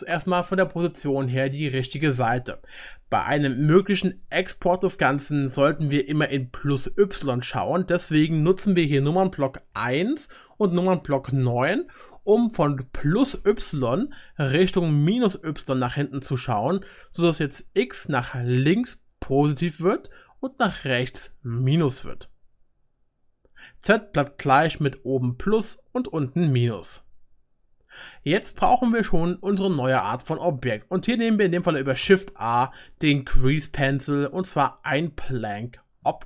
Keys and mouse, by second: 9.7 KP_1, 10.7 click, 11.1 KP_9, 12.0-33.3 right drag, 17.3-24.0 middle drag, 32.0 shift+a, 33.3-36.0 drag, 36.0-36.2 right drag.